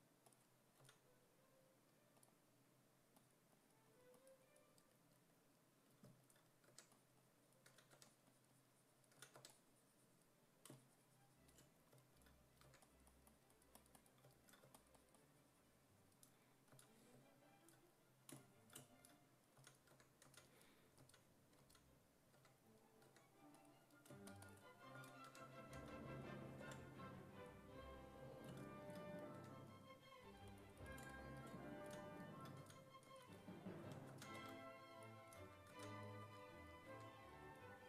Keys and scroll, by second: 0.8 s, 6.7-9.9 typing, 12.7 1, 16.8 s, 19.3-23.1 typing, 24.8-26.7 typing, 29.4 1, 31.9-36.9 typing.